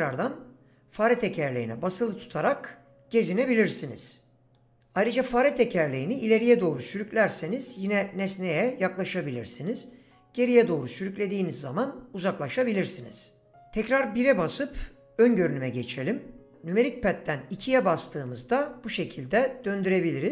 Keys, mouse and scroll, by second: 13.5 KP_1, 17.5-20.3 typing.